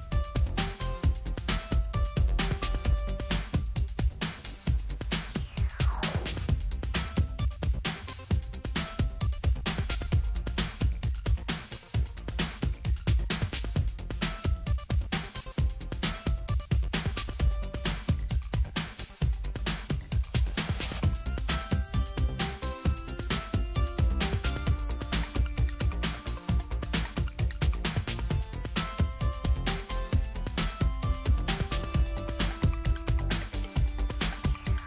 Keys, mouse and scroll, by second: 1.9 click, 5.2 click, 7.4-13.5 drag, 14.1 Return, 15.6-16.0 ctrl+scroll down 2, 16.2-16.7 ctrl+scroll up 2, 17.8-20.9 drag, 26.3-27.2 ctrl+scroll down 2, 29.7 click, 30.9-33.5 drag, 34.0-34.8 drag.